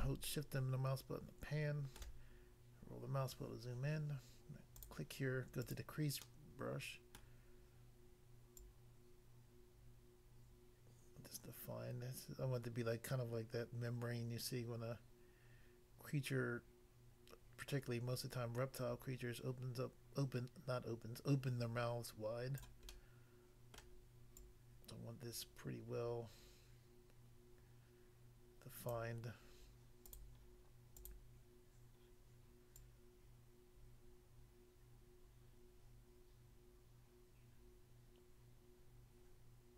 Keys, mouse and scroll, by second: 2.3 scroll up 1, 4.7 click, 4.8 click, 5.6 click, 5.7 click, 6.3 middle click, 7.2 middle click, 8.6 click, 22.6 click, 22.9 middle click, 23.7 middle click, 24.3 click, 28.9 click, 30.0 click, 30.1 click, 30.9 click, 31.1 click, 32.8 click.